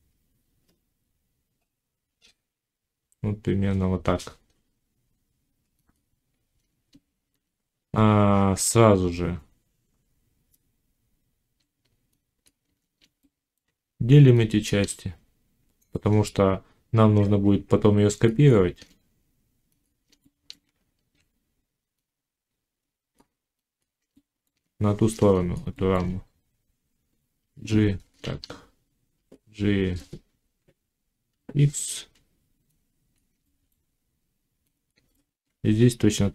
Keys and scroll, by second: 8.5 Tab, 20.5 Tab, 27.3 g, 28.1 shift+Tab, 29.0 g, 31.1 x.